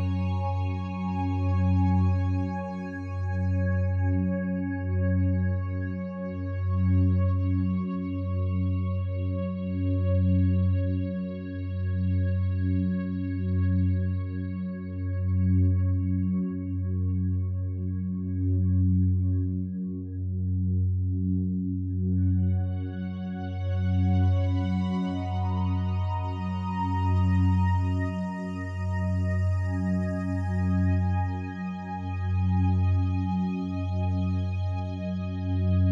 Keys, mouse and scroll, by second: 5.6 p, 5.7 l, 6.0 i, 17.9 click, 18.6 drag, 23.6 ctrl+7.